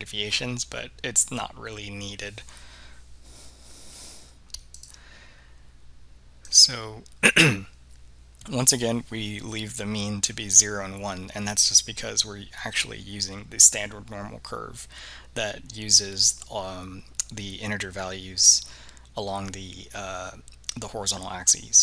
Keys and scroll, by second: 4.8 3, 6.7 Return.